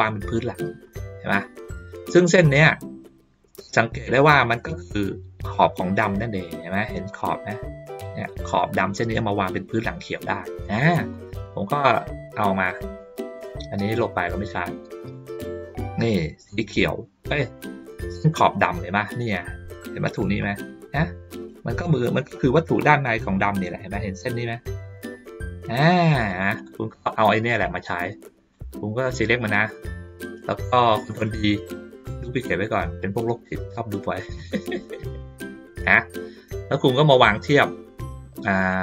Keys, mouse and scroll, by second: 0.9 middle click, 2.5 ctrl+middle click, 10.6 middle click, 11.2 middle click, 11.6 ctrl+middle click, 12.3 ctrl+middle click, 13.0 middle click, 14.3-15.1 drag, 16.5-17.3 drag, 17.6 middle click, 18.2-18.9 ctrl+scroll up 1, 20.4 click, 22.3 middle click, 26.3 middle click, 26.8 ctrl+middle click, 27.6-28.5 drag, 29.1 middle click, 33.0-35.9 drag, 36.8 middle click, 38.7-38.8 middle drag.